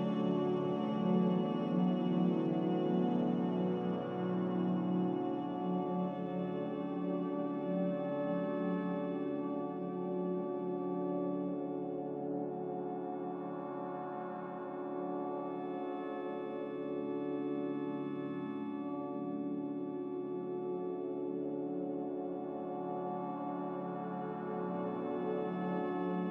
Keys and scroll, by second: 1.7 z, 6.3 r, 12.4 a, 13.8 ctrl+c, 19.7 ctrl+c, 23.4 z.